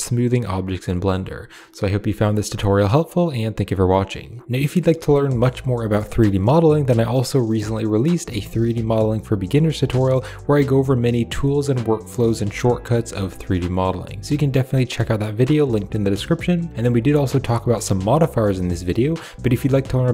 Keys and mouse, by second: 5.0 click, 7.7 click, 8.9 ctrl+z, 9.0 ctrl+click, 9.9 ctrl+click, 10.7 ctrl+click, 11.2 ctrl+r, 11.6 click, 13.1 g, 17.0-19.0 drag, 19.0 typing.